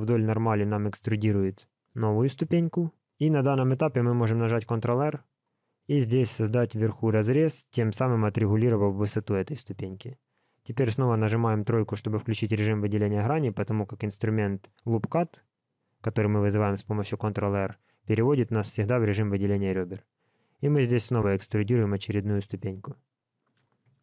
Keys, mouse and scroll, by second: 4.7 ctrl+r, 12.1 click.